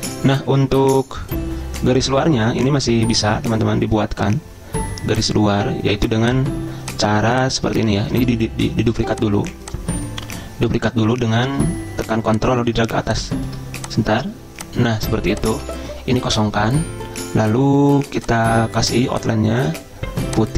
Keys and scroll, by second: 15.8 ctrl+a, 16.4 Delete.